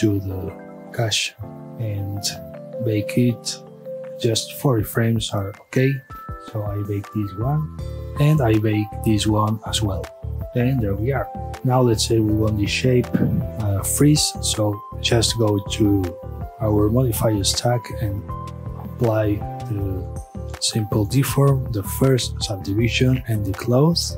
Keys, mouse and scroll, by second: 0.9-4.3 drag, 4.3 KP_Enter, 6.0 click, 11.5-12.1 middle drag, 12.1 scroll up 1, 12.3-15.0 middle drag, 15.0 click, 16.0 click, 17.7 click, 19.1-21.2 drag, 21.8 click.